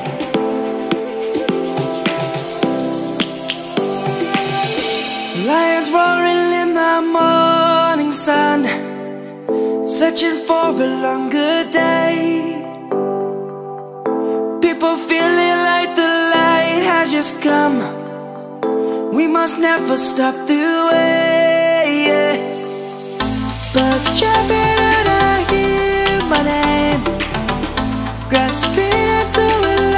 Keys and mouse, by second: 3.9 click, 4.3 right click, 4.7 click, 5.9 middle click, 8.0 click, 8.8 middle click, 12.6 shift+middle click, 16.7 `, 17.4 right click, 17.8 Tab, 18.6 click, 20.9 shift+click, 22.5 click.